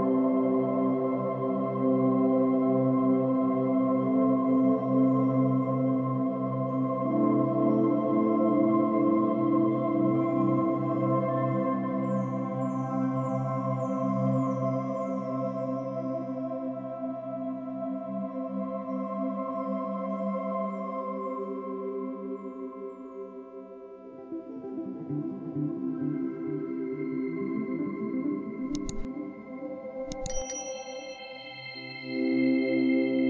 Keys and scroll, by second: 11.4 space, 13.3 f, 27.7 space.